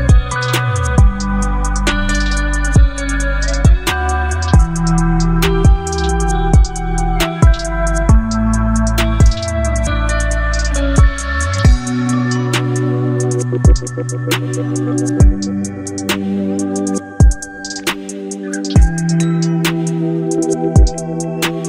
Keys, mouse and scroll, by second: 1.1 alt+scroll up 1, 2.2 space, 2.3-3.3 click, 2.7 space, 4.6-6.2 drag, 16.8-17.9 drag, 18.3-19.1 click, 19.5-20.9 drag, 21.4-21.6 drag.